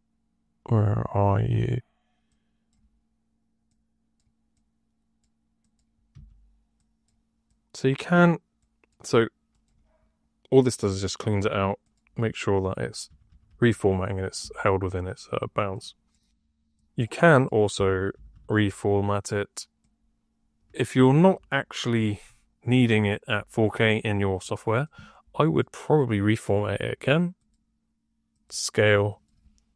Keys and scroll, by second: 6.0 1, 12.9 d, 13.2 d, 13.4 d, 13.6 d, 17.6 Tab, 17.8-18.9 typing.